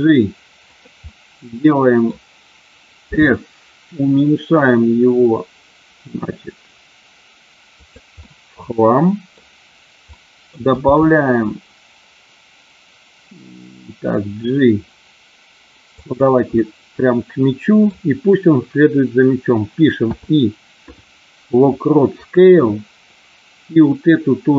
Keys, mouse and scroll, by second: 1.0-2.2 middle drag, 3.0 s, 7.7 click, 8.2-9.3 middle drag, 10.2-10.7 middle drag, 10.8 g, 16.1 click, 16.5 scroll up 1, 16.7-17.8 middle drag.